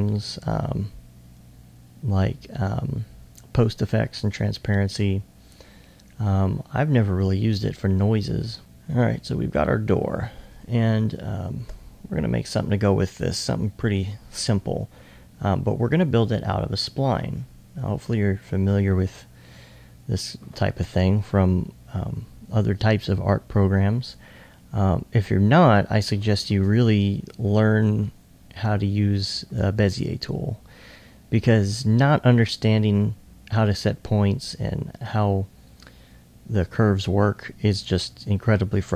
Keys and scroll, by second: 9.1 1, 10.6 alt+2.